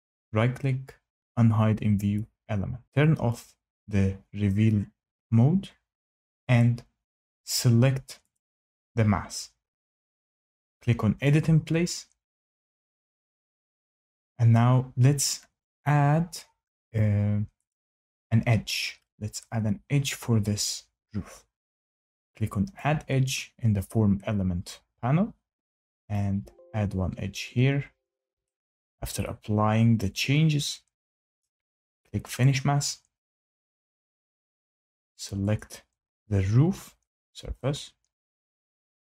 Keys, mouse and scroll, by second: 2.1 click, 5.1 click, 5.4 click, 6.5 click, 7.3 Tab, 8.3 click, 11.2 click, 17.6 click, 23.8 click, 26.1 click, 31.4 shift+middle click, 32.4 click, 35.5 click, 38.1 shift+right click.